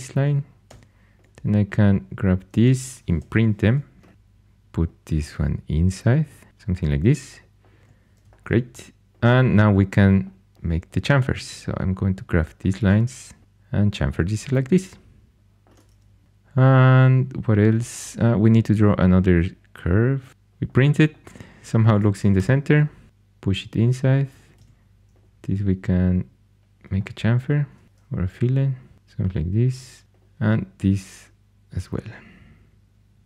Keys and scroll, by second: 0.6 2, 3.1 shift+Tab, 4.1 3, 7.7 2, 20.3 Caps_Lock, 22.3 3, 24.5 2.